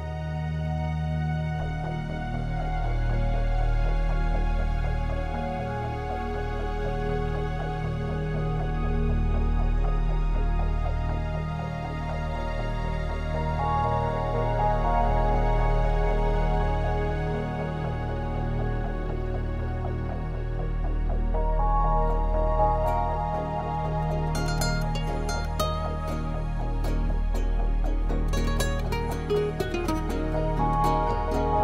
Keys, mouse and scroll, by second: 0.2 click, 1.5 click, 2.5 click, 5.5 click, 6.7 click, 8.7 middle click, 11.0 F12, 11.0 Escape, 15.2 click, 17.0 click, 17.9 middle click, 20.1 click, 20.3 click, 20.5 click, 20.8 click, 21.0 click, 21.3 click, 22.2 middle click, 24.0 click, 24.5 click, 26.5 F12, 30.7 click.